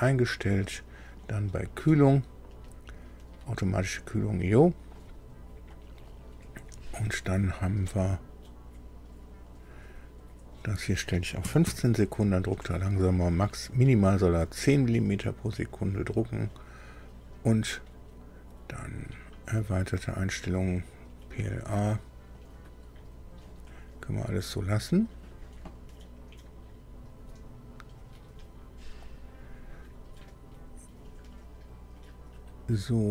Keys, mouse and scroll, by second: 0.6 click, 10.5 click, 11.4 KP_1, 11.6 KP_5, 13.4 click, 18.7 click.